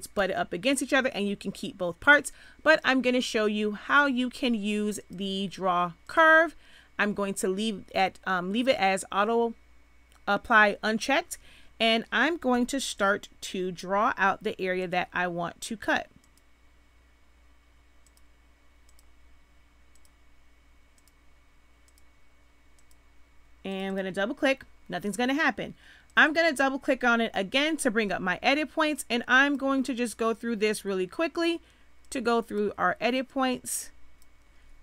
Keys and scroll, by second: 12.5 z.